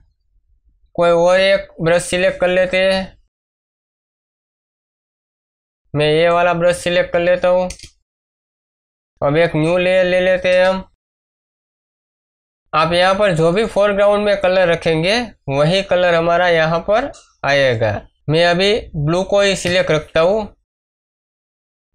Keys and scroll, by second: 7.6 Return, 9.5 ctrl+shift+n, 10.4 Return, 19.6 Escape.